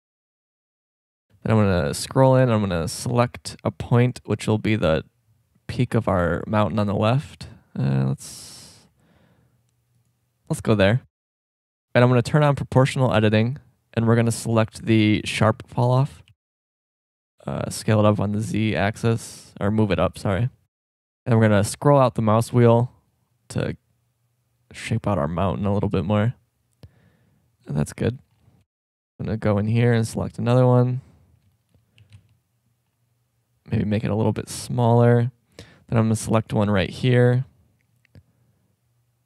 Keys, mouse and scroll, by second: 0.1 middle click, 0.3 middle click, 0.8 shift+scroll up 1, 3.8 middle drag, 4.7-5.1 middle drag, 5.4 middle click, 6.7 drag, 7.3-8.3 middle drag, 8.4 middle click, 8.4-9.8 drag, 10.3 middle click, 11.8-12.5 middle drag, 13.1 click, 14.5 click, 16.3 g, 17.9-18.5 shift+scroll up 1, 19.1 g, 28.0 shift+scroll up 1, 30.8-31.2 middle drag, 31.2-31.5 shift+scroll up 2, 31.4 middle drag, 32.0 g, 35.2 middle click, 35.6 middle click, 36.4 right click, 36.8 click, 36.9 middle click, 37.2 click, 37.2 g, 37.9-39.0 middle drag.